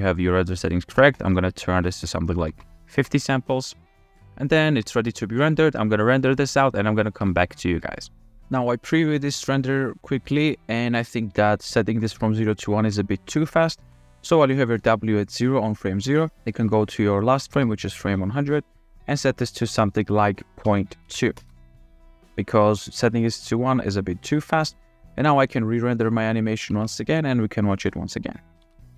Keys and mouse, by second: 1.3-3.4 drag, 6.5-7.6 shift+drag, 10.0 click, 11.5 Up, 12.1 Down, 13.1 Up, 14.5 Down, 17.9 Up, 19.3-21.9 drag, 23.6-25.0 drag, 26.9 alt+a.